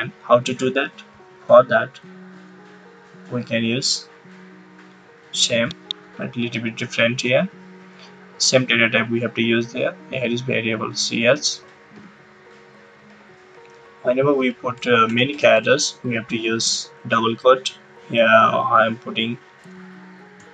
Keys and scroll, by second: 10.9 [, 11.9 ], 12.9 Right, 14.4 Right, 15.0 BackSpace, 16.5 shift+'.